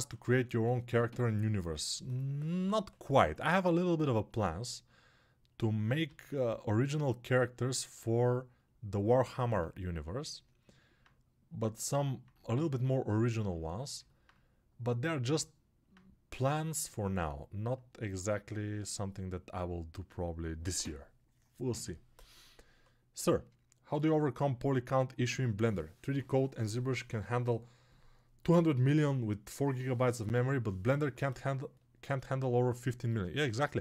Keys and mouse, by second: 17.1-32.4 alt+right drag, 32.4-33.8 ctrl+alt+drag.